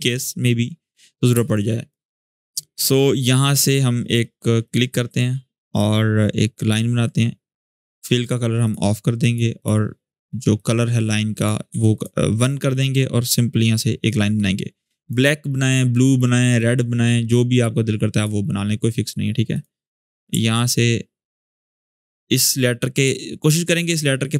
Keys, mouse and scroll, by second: 0.6-1.1 scroll up 1, 1.1 space, 1.3 click, 1.6-1.9 space, 4.4 click, 5.8-6.4 drag, 11.4 1, 11.7-14.9 drag, 16.3-17.9 drag, 20.4-21.6 alt+drag, 22.2-23.8 drag.